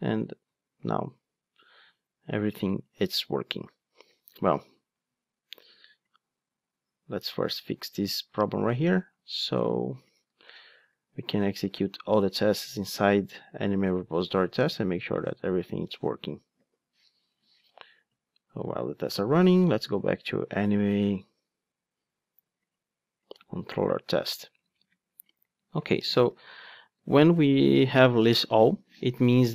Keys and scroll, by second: 10.4 super+/, 11.2 ctrl+Tab, 26.3 super+/.